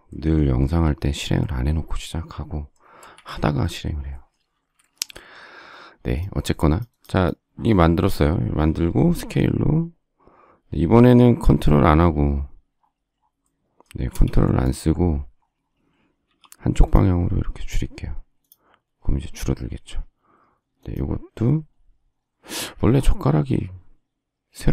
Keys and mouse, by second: 0.6 s, 3.0 space, 3.1 Escape, 9.1 s, 14.1 space, 16.2 s, 22.6 Escape.